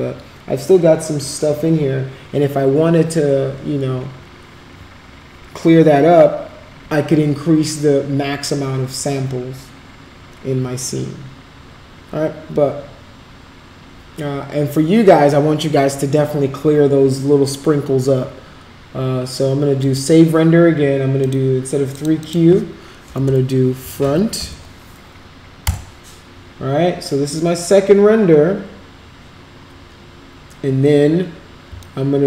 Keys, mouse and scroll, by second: 19.8 click, 21.2 click, 22.0 click, 22.2 click, 23.6-24.9 typing, 31.8-32.2 alt+drag.